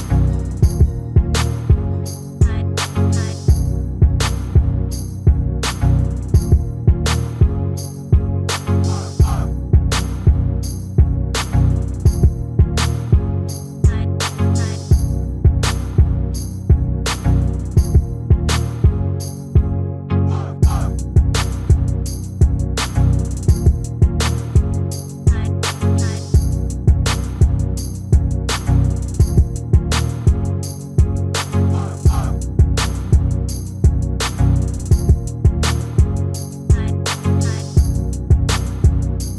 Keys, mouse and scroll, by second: 1.9 shift+d, 9.3 shift+d, 20.4 ctrl+z, 23.1 shift+d, 27.9-34.1 middle drag, 35.9 shift+r, 37.6 ctrl+z, 38.4 ctrl+z.